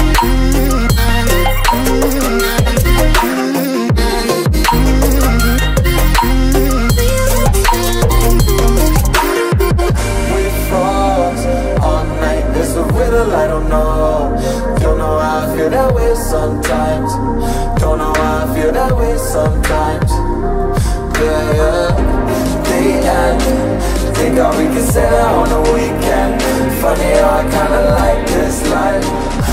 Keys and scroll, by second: 20.1 Down, 20.9 Right.